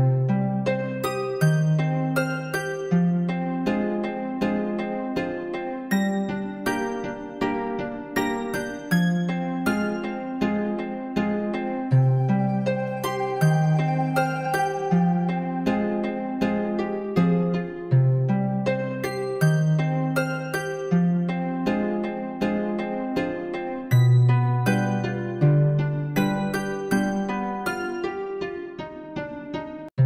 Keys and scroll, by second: 21.9 ctrl++.